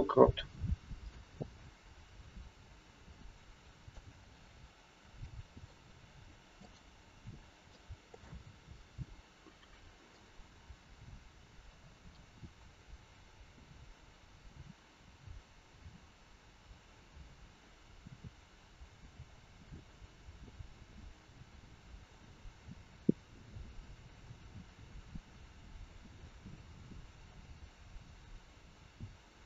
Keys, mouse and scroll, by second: 1.2 click, 4.2 scroll down 2, 5.2 shift+middle click, 5.2 scroll down 3, 6.5 click, 7.3 scroll up 2, 7.6 shift+middle click, 10.1 click.